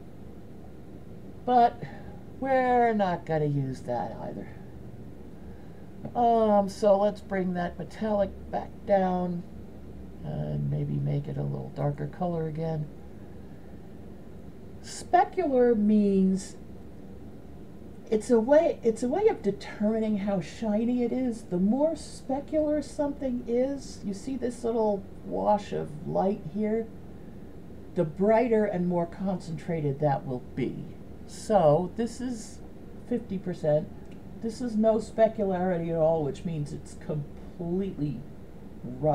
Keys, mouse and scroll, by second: 0.9 click, 4.9 right click, 8.1 click, 32.7-39.1 drag.